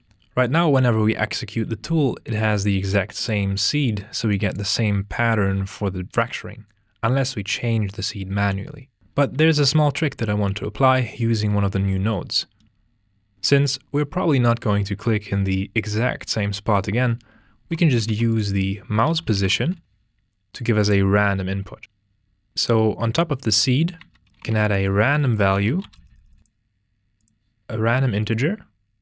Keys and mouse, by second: 0.0 click, 0.0 g, 0.4 click, 3.2 click, 4.3 click, 12.2 middle click, 18.1 shift+a, 20.8 click, 22.7 click, 23.8 d, 24.0 click, 24.8 shift+a, 26.4 click, 27.2-28.3 drag.